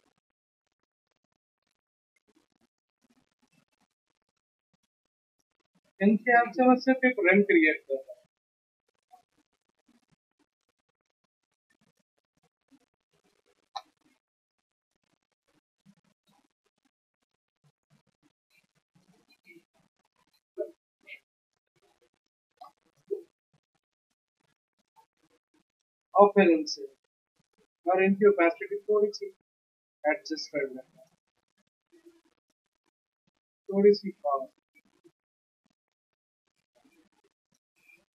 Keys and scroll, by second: 13.7 x.